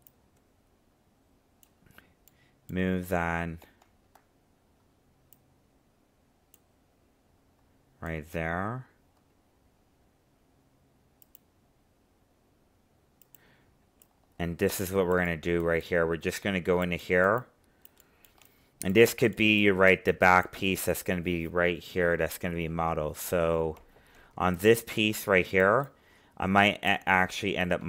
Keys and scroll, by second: 3.6 ctrl+z.